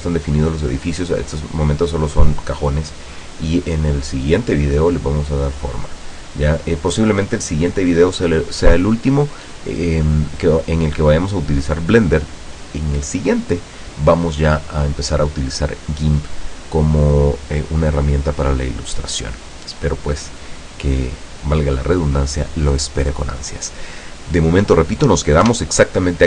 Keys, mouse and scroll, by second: 25.6 F12.